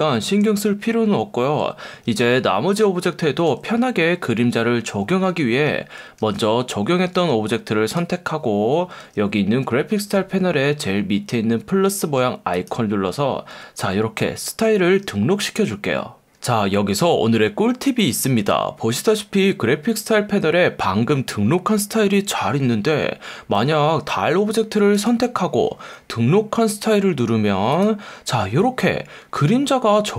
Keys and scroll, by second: 2.2 F1, 3.5 F1, 6.2 F1, 7.2 F1, 9.0 F1, 12.1 F1, 20.0 F1, 23.6 F1, 26.0 F1, 27.1 F1.